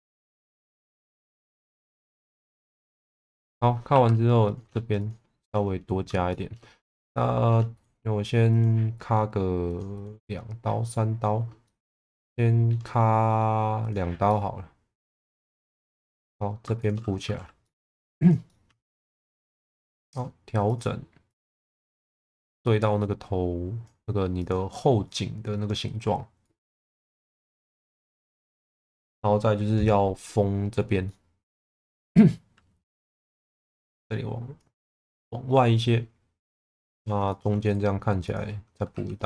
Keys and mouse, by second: 1.1 shift+middle click, 3.9 2, 4.9 shift+click, 6.3 shift+middle click, 7.1 middle click, 9.6 click, 10.0 click, 11.6-12.7 middle drag, 13.8 click, 14.2-15.5 middle drag, 15.8 2, 16.1 click, 16.7 shift+click, 17.2 f, 17.6 middle click, 17.9 1, 18.2 click, 18.4 alt+middle click, 19.3 click, 20.6 click, 24.4 click, 25.2 click, 26.4 click, 31.0-32.3 middle drag, 32.7 2, 33.8 click, 35.1-36.4 middle drag, 36.6 2, 36.9 click, 37.2 shift+click, 38.9 2.